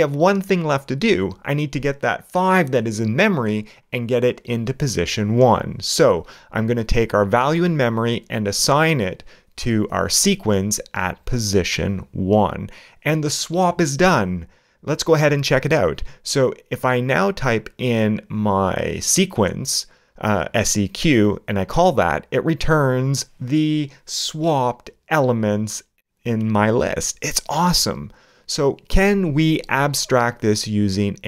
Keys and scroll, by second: 10.6 alt+q, 11.0 alt+8, 11.3 alt+i, 13.0 alt+space, 13.6 shift+0, 13.7 shift+space, 17.8 shift+a, 18.2 shift+Return, 22.3 shift+Return.